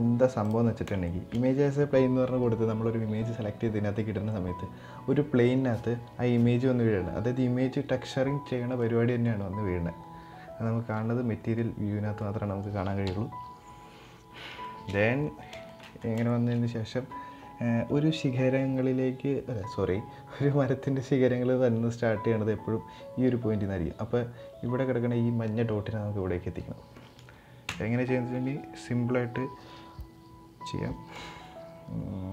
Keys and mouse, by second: 0.7 shift+middle click, 8.4-9.0 middle drag, 11.9-12.3 middle drag, 11.9 z, 12.8 KP_7, 14.4 shift+middle drag, 15.3 shift+middle click, 16.0 shift+middle click, 27.4 Tab, 31.0 g.